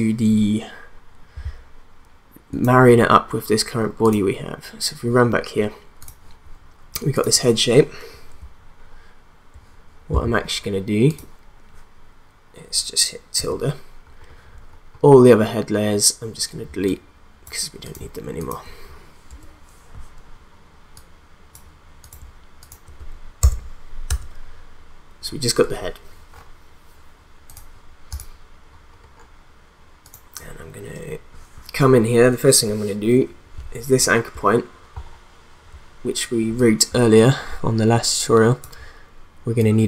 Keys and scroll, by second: 19.3 BackSpace, 23.4 BackSpace.